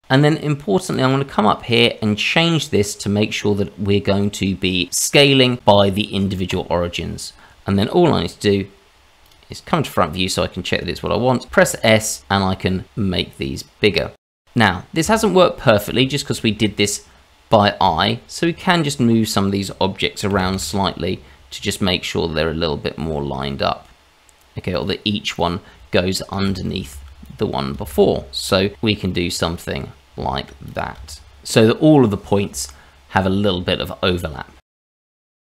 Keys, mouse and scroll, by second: 0.0 middle click, 0.9 click, 9.2 click, 10.0-10.5 scroll down 1, 10.5-11.5 scroll up 1, 11.5 s, 14.5-15.3 scroll up 2, 15.3-15.9 scroll up 1, 16.1 shift+middle click, 17.8 Tab, 18.8 click, 20.3 g, 24.6 click, 24.9 Tab, 25.4 shift+z, 25.6 click, 26.0 shift+z, 26.4 g, 28.2 Tab, 28.4 click, 28.6 Tab, 29.3 Tab, 29.7 shift+z, 29.9 click, 30.2 shift+z, 30.3 shift+z, 30.3 g, 31.7 shift+middle click, 32.0 click, 32.2 Tab, 32.5 click, 32.6 Tab, 33.4 shift+z, 33.5 click, 33.8 shift+z, 34.1 g.